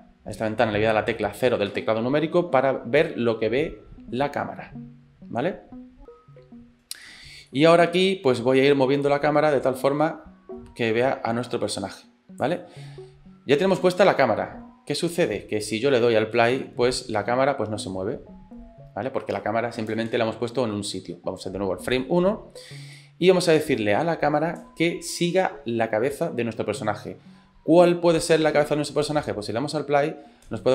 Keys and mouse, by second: 1.7 KP_0, 7.2 shift+click, 7.5 middle click, 8.0 shift+middle click, 9.1-12.5 drag, 16.4 space, 20.2 space, 21.9 click, 22.9 middle click, 23.9 shift+middle click, 29.1 space.